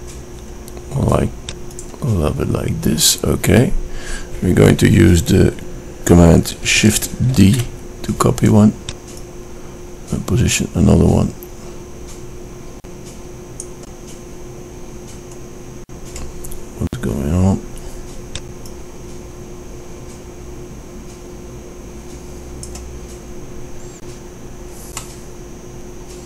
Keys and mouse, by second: 8.7 shift+d, 15.0-16.1 middle drag, 16.1-19.1 drag, 19.6-21.1 drag, 24.8-26.2 middle drag.